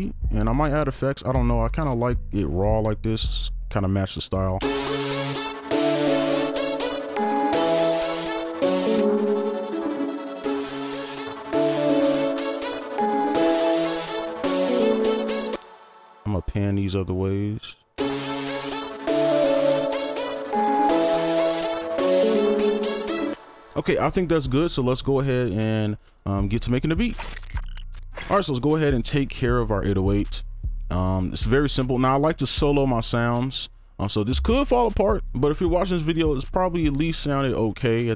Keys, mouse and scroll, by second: 1.8 double click, 4.6 space, 15.5 space, 17.9 space, 23.3 space.